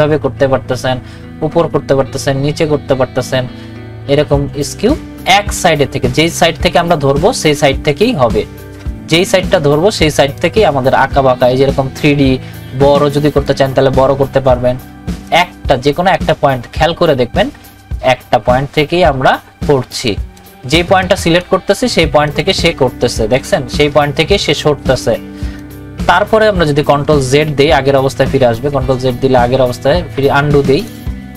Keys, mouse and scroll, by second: 7.7-27.5 drag, 27.5 ctrl+z, 28.4 ctrl+z, 30.1 ctrl+z, 30.8 click.